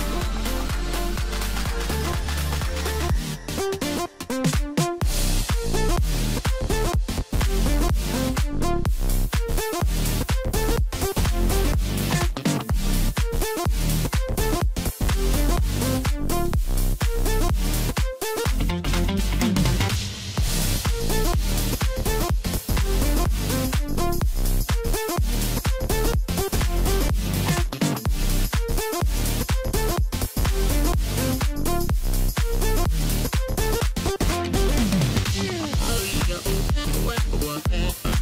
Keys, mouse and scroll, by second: 0.1 shift+click, 1.0 shift+click, 1.2 shift+click, 1.9 shift+click, 2.0 shift+click, 2.8 shift+click, 2.9 shift+click, 3.9 shift+click, 4.5 shift+click, 4.7 shift+click, 5.7 shift+click, 5.9 shift+click, 6.9 shift+click, 7.1 shift+click, 9.2 ctrl+i, 10.9 x, 13.2 a, 13.9 1, 14.5-16.9 middle drag, 16.9-17.7 scroll up 1, 17.7 KP_1, 18.4-19.1 scroll up 1, 19.7 e, 21.9 scroll down 3, 22.2-24.7 middle drag, 24.7 KP_1, 25.4-25.8 scroll up 2, 25.9 e, 28.9 middle click, 29.4 scroll down 2, 30.2 3, 31.1 a, 31.6-33.3 middle drag, 33.3 click, 35.5 click, 35.6-37.3 middle drag, 37.3 shift+n, 38.1-38.2 middle drag.